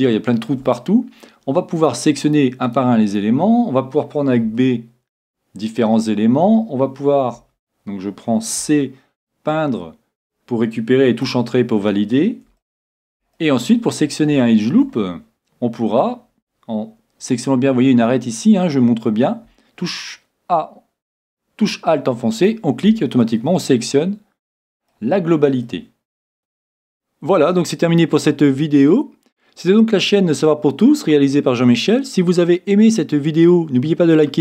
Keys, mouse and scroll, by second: 0.1-1.8 middle drag, 1.8-4.9 right drag, 4.6 b, 7.4 a, 8.6 c, 12.6-17.0 middle drag, 16.1-17.0 scroll up 1, 22.4-24.3 right drag, 23.2-25.1 middle drag, 25.7 middle click.